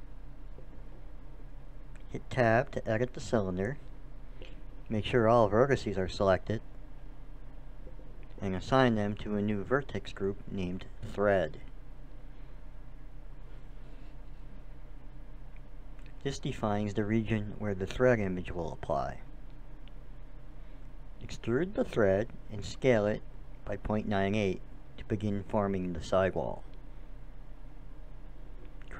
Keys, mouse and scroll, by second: 3.7 Tab, 6.6-8.5 drag, 8.9-13.2 drag, 15.1-17.0 drag, 19.6 e, 20.3 click, 22.0 s.